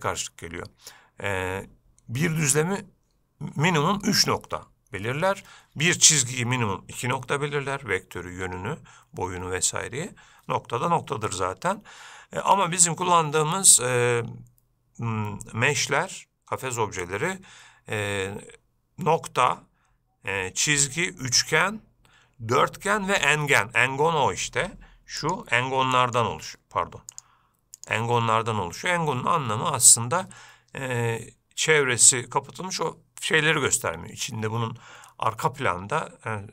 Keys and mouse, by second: 25.5-26.4 drag, 27.3-28.2 drag, 35.5-36.5 middle drag.